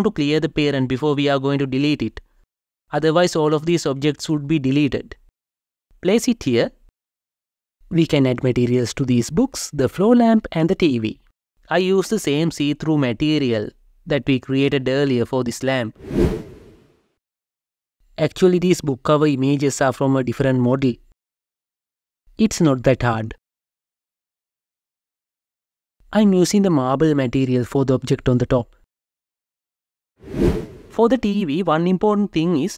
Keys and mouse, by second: 1.0 Delete, 3.8-4.5 drag, 6.0 g, 6.3 z, 14.2 click, 16.5 Return, 17.5 click, 22.1 click, 26.4-28.5 drag, 31.7-32.7 drag.